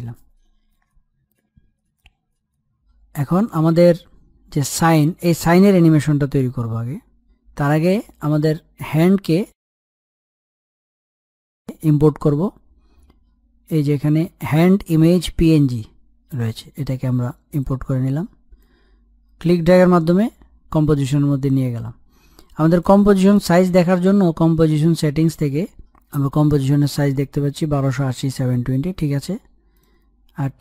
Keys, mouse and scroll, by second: 0.6 scroll up 1, 0.8 middle click, 1.5 scroll up 1, 1.7 middle click, 2.1 scroll up 1, 2.3-4.6 middle drag, 4.6 click, 5.7-6.1 scroll down 1, 7.1-7.9 scroll up 1, 7.9-9.7 middle drag, 9.7-15.3 drag, 18.6-22.5 drag, 22.5 right click, 23.7-28.9 drag, 29.7-30.6 drag.